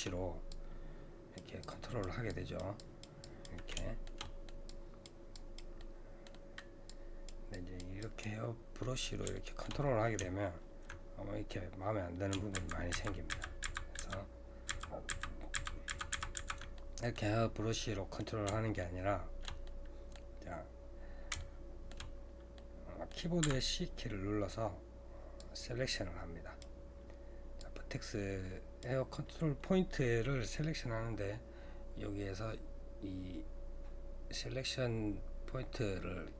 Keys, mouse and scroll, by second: 0.5-3.8 drag, 3.8 shift+middle click, 4.7-5.8 drag, 5.8-6.9 middle drag, 6.9-8.8 drag, 8.8-12.4 middle drag, 16.7 typing, 16.8 middle click, 17.5-17.9 scroll down 1, 17.9-23.4 middle drag, 23.4 c.